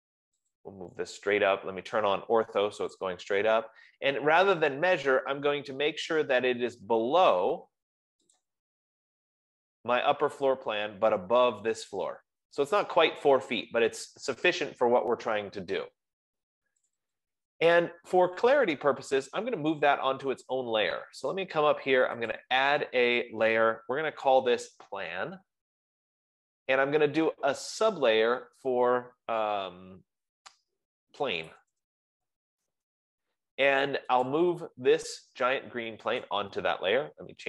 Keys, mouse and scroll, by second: 1.0 click, 2.3-3.1 typing, 4.0 click, 6.7-8.4 drag, 8.9-13.8 drag, 17.3 click, 18.6 click, 21.6 click, 24.9-26.1 typing, 28.4 click, 31.3-32.8 typing, 34.8 click, 36.8 right click, 37.0-37.4 typing.